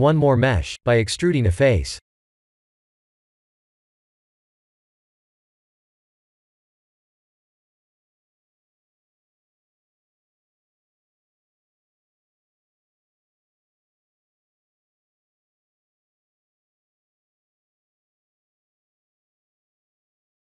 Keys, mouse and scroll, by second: 0.4 3, 0.6 click, 1.7 Tab, 2.1 3, 2.4 click, 3.1 KP_1, 3.8 middle click, 5.7 middle click, 6.3 KP_1, 6.8 KP_3, 8.5 shift+middle click, 9.0-9.7 scroll up 5, 9.7 shift+middle click, 10.5 r, 12.6 ctrl+z, 13.2 e, 13.9 g, 20.2 Tab, 20.2 s.